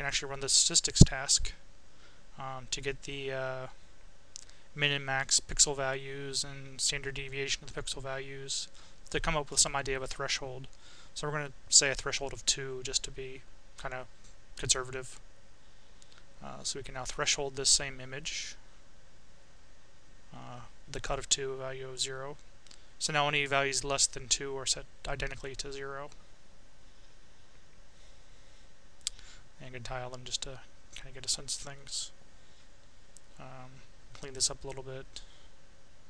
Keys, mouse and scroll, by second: 1.2-2.2 drag, 2.4 click, 3.6 click, 4.8-6.6 drag, 7.0 click, 8.6 click, 10.4 click, 12.2 click, 14.0 click, 15.0 Delete, 16.8 click, 18.0-19.0 drag, 21.2 click, 22.3-25.4 right drag, 27.5 click, 28.7 click, 30.6 click, 33.5 click, 35.4 click.